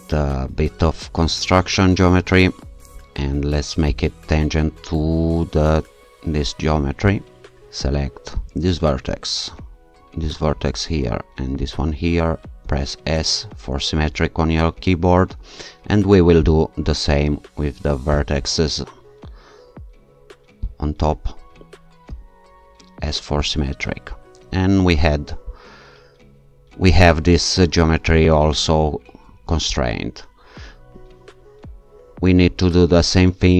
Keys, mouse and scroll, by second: 1.0-1.9 scroll up 1, 3.9 click, 7.1 right click, 8.4 click, 10.3 click, 11.6 click, 12.7 s, 16.5 click, 18.2 click, 20.6 click, 22.2 s, 23.4-24.2 scroll down 2, 31.3-32.4 shift+scroll up 2.